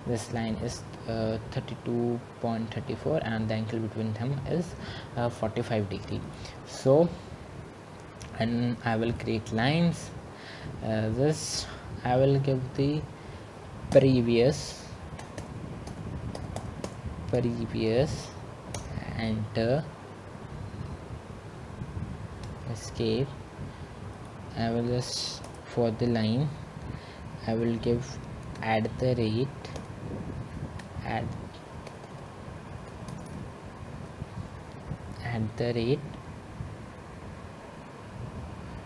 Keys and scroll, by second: 19.1 typing, 22.8 Return, 25.8 Escape, 28.9 Return, 30.1 2, 31.1 Delete, 32.1 shift+2, 33.3 Delete, 35.0 BackSpace.